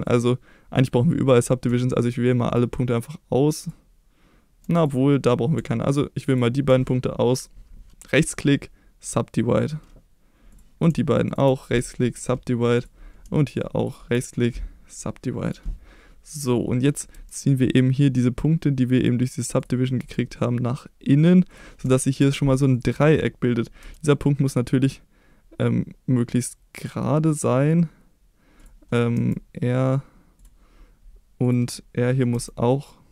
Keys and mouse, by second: 0.0 shift+click, 8.2 right click, 10.5 click, 11.2 shift+click, 11.7 right click, 13.7 shift+click, 14.3 right click, 15.4 click, 17.1 g, 18.9 click, 20.0 g, 21.5 click, 21.9 shift+middle click, 22.7 click, 23.8 g, 28.5 click, 29.1 r, 30.3 click, 31.4 click, 32.3 r.